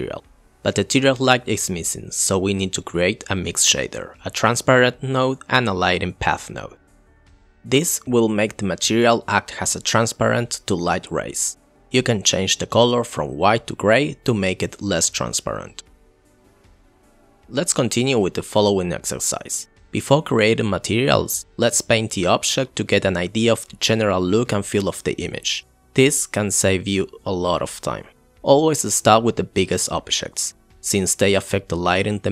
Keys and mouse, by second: 1.3 shift+a, 3.5 click, 4.0 shift+a, 6.0 click, 6.9 shift+a, 7.7 shift+a, 9.6-10.5 drag, 26.8 click.